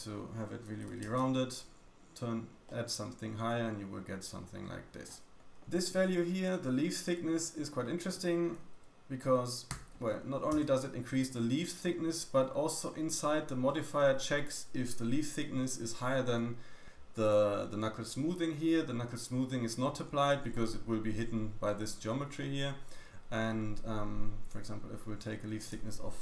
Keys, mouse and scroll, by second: 2.6 middle click, 5.3 click, 12.3-12.8 scroll down 2, 12.8 middle click, 13.1-13.6 scroll up 1, 13.6 middle click, 20.5 middle click, 22.3 middle click, 25.5 click.